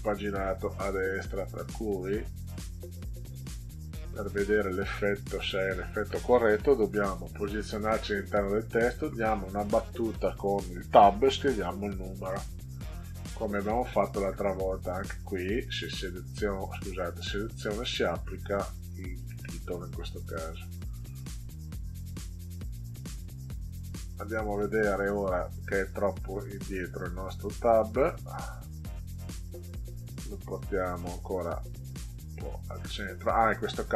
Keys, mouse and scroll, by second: 1.7 scroll up 2, 2.4 scroll up 2, 3.9 click, 4.5 click, 4.7 click, 9.1 Tab, 14.0 click, 15.3 right click, 16.7 drag, 17.8 click, 19.2 click, 21.4 click, 22.4 click, 23.7 click, 26.8 click, 28.3 click, 30.8-31.8 drag, 32.5 click.